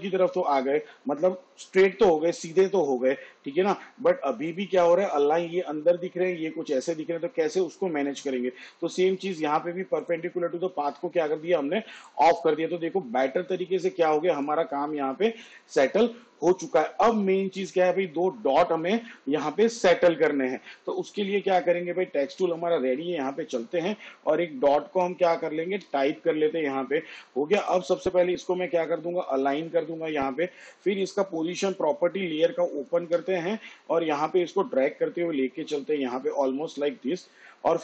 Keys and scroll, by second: 26.0 ., 33.3 p.